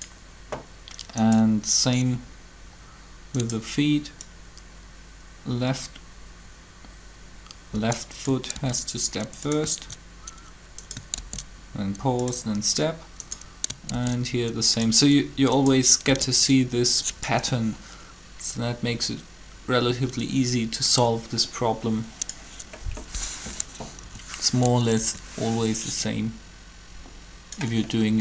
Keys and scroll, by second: 8.5 shift+d, 12.4 shift+d, 13.9 shift+d, 16.1 shift+d, 24.0 3, 24.9 Up.